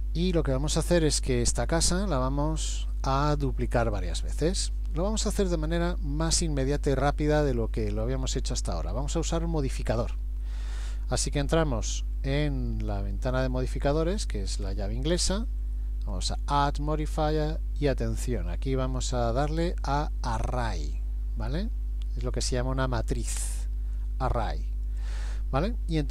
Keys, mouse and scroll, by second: 1.4 shift+middle click, 3.0 middle click, 4.0 middle click, 13.1 click, 16.1 click.